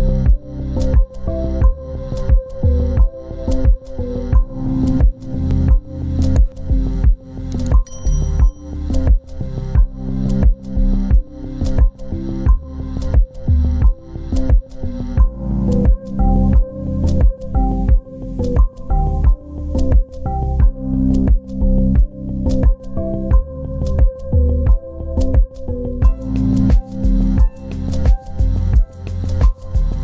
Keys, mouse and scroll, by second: 6.4 shift+click, 7.3 c, 9.3 ctrl+alt+click, 14.2 ctrl+alt+click, 17.9 double click, 18.8 ctrl+z, 19.5 double click, 20.4 ctrl+space, 20.7 ctrl+click.